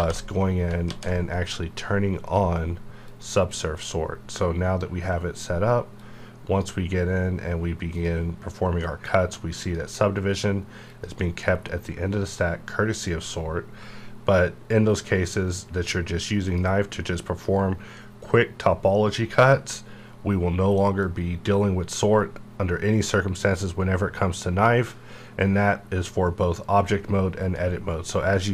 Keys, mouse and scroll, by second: 0.0 ctrl+z, 0.8 ctrl+z, 2.3 click, 5.9 click, 6.0-10.8 drag, 16.4 click, 21.0-24.1 drag, 27.3 click.